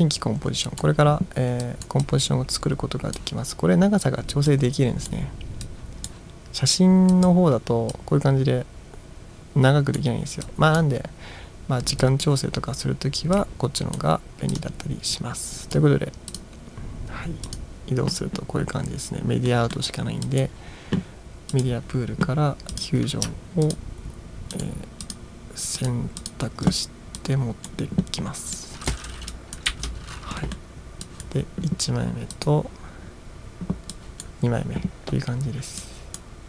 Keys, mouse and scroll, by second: 1.7 click, 2.1-3.2 drag, 4.5-5.1 drag, 5.7 click, 7.1 click, 8.0-10.0 drag, 10.5-10.8 drag, 12.1 click, 13.4 click, 14.6-15.8 drag, 16.3 click, 17.5 click, 19.5 middle drag, 20.3 drag, 21.6 click, 22.8 click, 23.7 ctrl+click, 24.6 ctrl+click, 25.1 ctrl+click, 25.8 ctrl+click, 26.3 ctrl+click, 27.2 click, 28.6-28.9 drag, 29.4 click, 29.7 BackSpace, 30.5 middle drag, 31.1 click, 32.4 click, 34.0-34.3 drag, 35.9-36.2 drag.